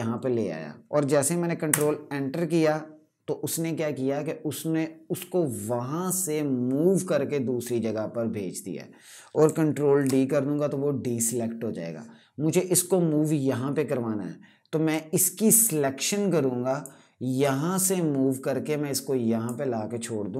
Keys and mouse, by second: 1.4 KP_Enter, 9.1 ctrl+Num_Lock, 9.7 d, 14.6 d, 14.8 click.